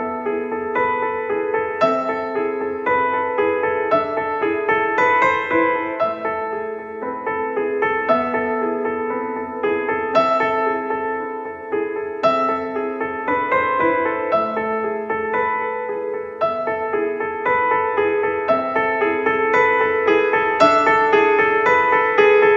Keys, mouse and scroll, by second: 1.2 click, 2.3-3.5 drag, 3.5 middle click, 4.5 click, 5.1 middle click, 5.5 click, 6.3 right click, 6.7 Tab, 7.7 Tab, 8.5 a, 8.7 a, 8.7 middle click, 8.8 a, 8.9 click, 9.3 ctrl+KP_Add, 11.1 x, 11.8 middle click, 12.1 a, 12.5 a, 12.7-14.1 drag, 13.1 Tab, 14.1 alt+c, 15.5 Tab, 15.7 click, 16.7 a, 16.9 middle click, 16.9 a, 18.7-19.8 d, 19.8 n, 20.7 click, 22.3-22.5 d.